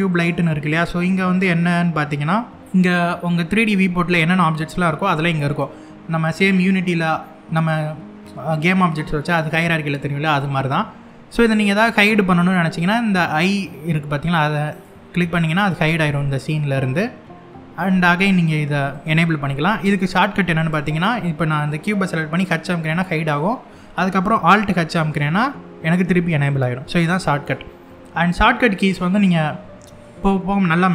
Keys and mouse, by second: 0.2 click, 14.4 click, 18.6 click, 20.3 click, 22.3 h, 24.7 alt+h, 26.6-27.0 middle drag.